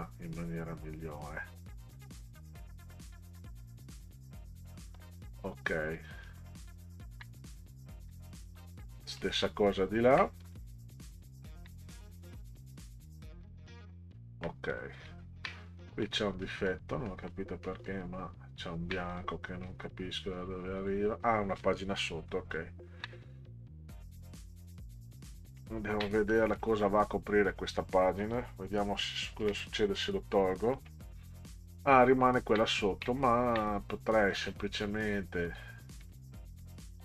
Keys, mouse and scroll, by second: 0.4 click, 1.8-3.1 drag, 4.7 middle drag, 6.2 ctrl+click, 7.7 ctrl+scroll down 4, 8.4 middle click, 9.0 middle click, 9.7 ctrl+scroll up 2, 10.4 click, 11.2 ctrl+scroll up 2, 12.8 click, 14.7 click, 15.2 ctrl+scroll down 2, 15.8 middle click, 16.4 middle click, 17.1 middle click, 17.6 middle click, 19.1 click, 19.7 click, 20.8 click, 22.3 ctrl+z, 23.5 click, 25.6 ctrl+scroll down 4, 26.3 middle click, 29.4 Delete, 33.1 ctrl+click, 34.3 click, 36.0 click, 36.6 click.